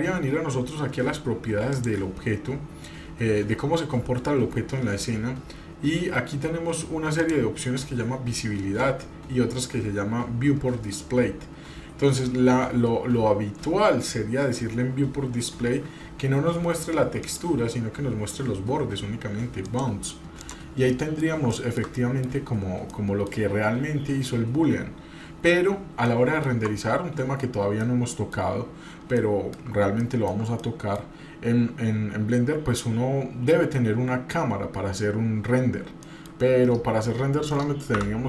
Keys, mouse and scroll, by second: 1.7 click, 5.2-6.1 scroll down 4, 6.3-7.2 scroll down 2, 7.2 click, 9.6-11.4 scroll down 2, 11.4 scroll up 1, 12.0-12.7 scroll down 1, 17.2-19.8 drag, 20.4 click, 20.9 middle click, 21.5 shift+middle drag, 22.0-22.3 middle drag, 22.4 scroll up 1, 22.9-23.3 middle drag, 26.1 middle click, 27.8-28.3 shift+middle drag, 28.5-29.0 scroll down 2, 29.2-29.6 shift+middle drag, 30.0 shift+middle click, 30.6 middle click, 33.2-34.4 scroll down 5, 34.4-36.0 scroll up 5, 36.0 middle click.